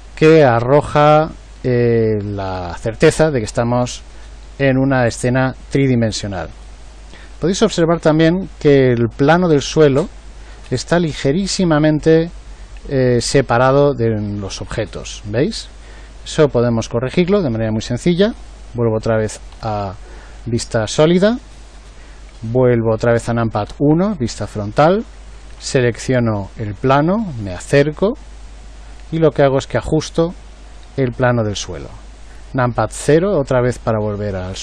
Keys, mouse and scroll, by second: 19.1 z, 19.5 z, 23.6 KP_1, 33.0 KP_0.